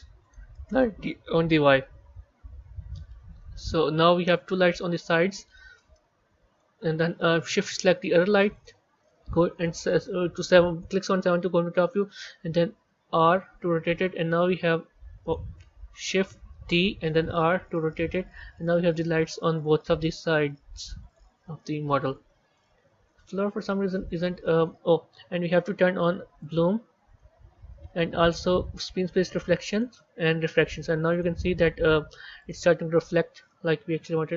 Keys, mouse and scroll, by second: 1.8-3.3 scroll down 2, 3.3 g, 5.2-8.2 middle drag, 8.4 shift+click, 11.2 KP_7, 13.0 r, 16.5 shift+d, 19.9 g, 21.4-23.2 middle drag, 23.2-23.9 scroll up 4, 23.9 click, 25.2 click, 26.3 click, 28.9 click, 29.6-31.2 drag, 32.4-33.9 drag, 33.9 KP_1.